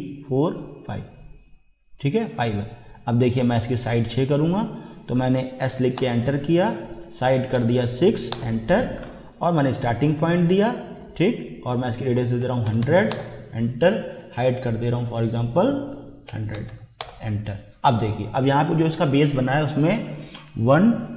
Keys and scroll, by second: 5.6 s, 6.0 Return, 7.6 6, 8.3 Return, 12.2-13.2 typing, 16.3 1, 16.6 0, 17.0 Return.